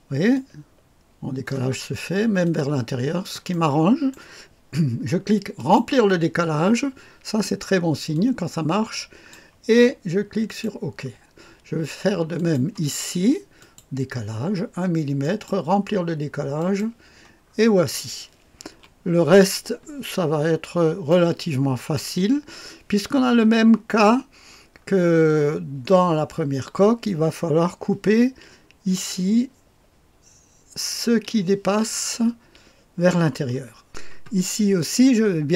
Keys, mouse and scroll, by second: 0.3-1.4 drag, 1.9-2.7 scroll up 2, 2.4 click, 3.4 click, 4.1 middle click, 5.5-9.3 drag, 10.4 click, 12.3 click, 13.5 click, 15.1 click, 16.5 click, 17.5-18.6 scroll down 2, 18.6 KP_2, 20.1-21.0 scroll up 1, 21.0-24.4 middle drag, 24.7-33.4 scroll down 1, 33.8 click, 34.7-35.5 scroll up 1.